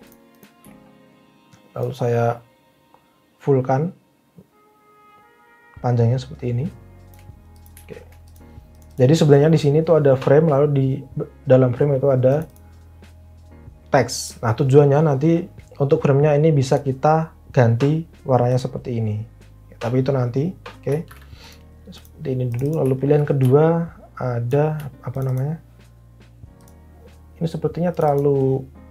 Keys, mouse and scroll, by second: 21.1 ctrl+z.